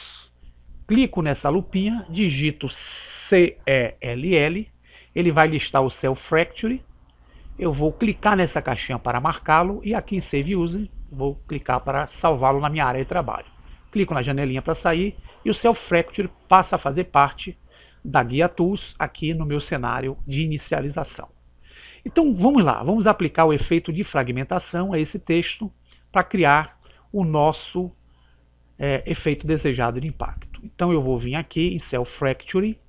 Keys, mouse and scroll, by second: 32.8 click.